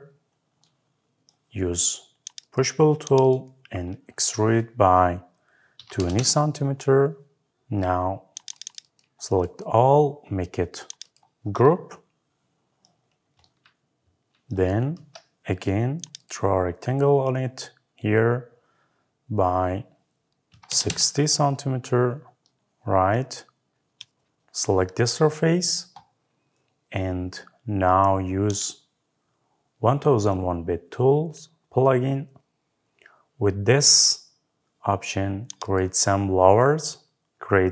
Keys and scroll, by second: 6.0 Return, 20.7 Return.